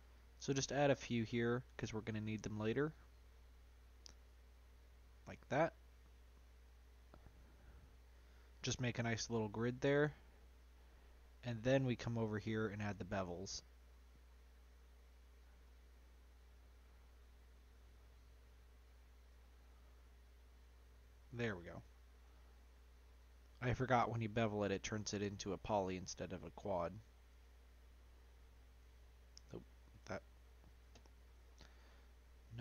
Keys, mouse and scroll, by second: 10.5 click, 11.0 middle click, 11.6 scroll up 3, 13.8 click, 14.7 shift+click, 15.6 shift+click, 16.5 shift+click, 17.6 click, 18.0 middle click, 18.5-19.2 scroll up 1, 19.2 shift+click, 19.5-20.5 scroll down 2, 20.5 shift+click, 20.9 middle click, 21.5-22.2 scroll down 2, 22.2 shift+click, 23.1 shift+click, 23.6-25.4 middle drag, 25.4 ctrl+m.